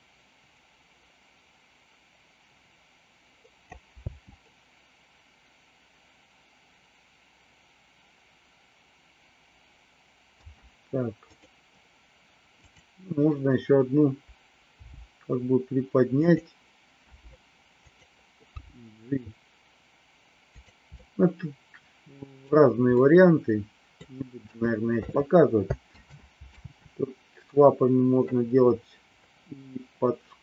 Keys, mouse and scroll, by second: 4.0 space, 10.4 space, 11.2 click, 12.5 click, 14.7 g, 17.0 r, 18.5 g, 21.0-22.5 middle drag, 23.0 middle click, 24.4 KP_3, 25.9 ctrl+z, 26.5 ctrl+z.